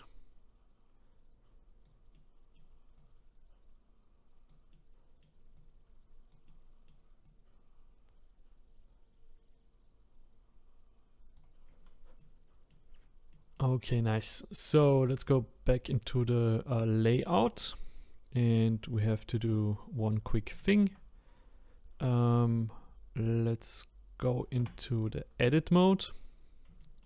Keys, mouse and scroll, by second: 2.1 middle click, 3.0-4.7 drag, 4.7 middle click, 5.5 click, 6.4 middle click, 7.2-10.3 drag, 11.6-12.2 scroll down 2, 12.2 middle click, 12.9-13.3 scroll down 1, 13.3-15.1 middle drag, 15.1 click, 15.8-17.6 scroll up 2, 17.6 click, 17.9-19.1 scroll up 1, 19.1 click, 19.6-20.1 scroll up 1, 20.1-20.4 scroll down 2, 20.6-24.2 shift+middle drag, 24.6 Tab, 26.0-26.8 scroll up 4, 26.8 shift+middle click.